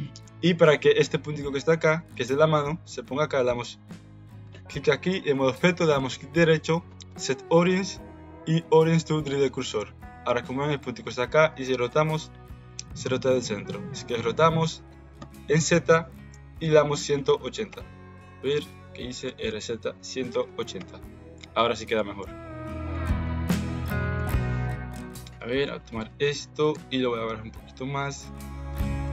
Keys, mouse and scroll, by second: 2.1 click, 6.0-9.4 right drag, 11.6 r, 18.7 ctrl+z, 19.2 r, 21.9 middle click, 22.9 middle click, 23.4 middle click, 24.1 KP_1, 25.3-26.7 drag, 26.7 g.